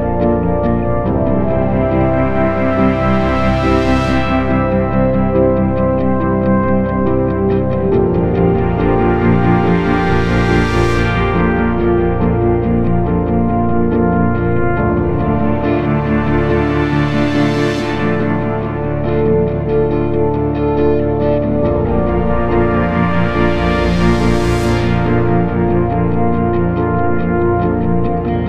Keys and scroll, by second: 0.7 p, 1.4 p, 2.8 p, 6.7 ctrl+d, 6.8 Escape, 7.0 F3, 12.3 F1, 12.8 ctrl+d, 12.9 Escape, 14.1 ctrl+z, 14.3 ., 19.9 p, 21.6 p, 27.3-28.4 typing.